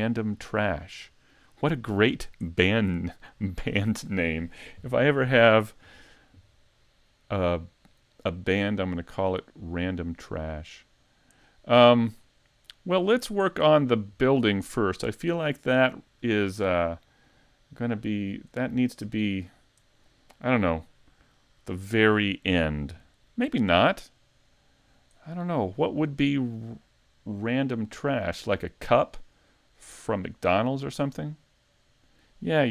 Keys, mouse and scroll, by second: 0.0 shift+middle click, 0.9 middle click, 2.0-2.4 scroll up 3, 2.5 shift+middle click, 3.4 middle click, 6.5-6.8 scroll down 2, 6.8 middle click, 8.9 shift+middle click, 9.6 middle click, 13.9 right click, 17.5 middle click, 18.1-19.1 scroll up 2, 18.6 middle click, 19.1 middle click, 24.0 middle click, 27.9 shift+middle click, 30.0-30.6 scroll down 2, 30.6 middle click.